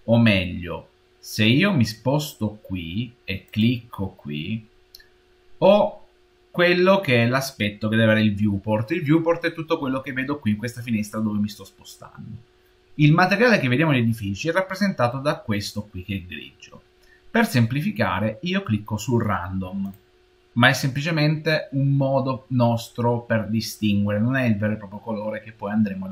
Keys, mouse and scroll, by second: 3.3 click.